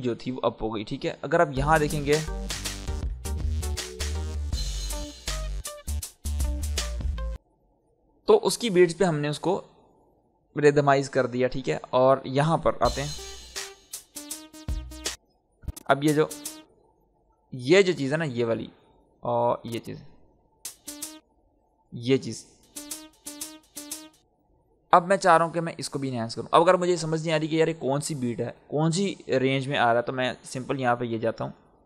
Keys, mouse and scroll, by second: 1.5 space, 7.3 space, 9.7-11.9 drag, 12.2-12.8 scroll up 1, 12.8 space, 15.1 space, 15.4 click, 16.0 space, 16.8 scroll up 1, 18.0-20.6 drag, 20.6 space, 22.0 click, 22.5 space, 26.4-30.2 drag, 31.0 scroll up 1.